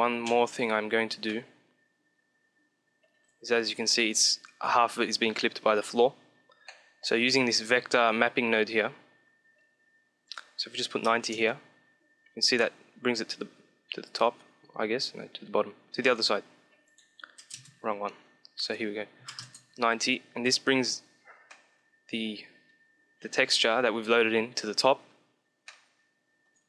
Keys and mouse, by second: 1.2-3.0 middle drag, 6.6-9.6 middle drag, 10.1-12.0 drag, 12.5-14.3 middle drag, 17.7 click, 18.5-20.0 drag, 20.3 KP_1, 21.3-23.2 shift+middle drag, 25.5-26.6 middle drag.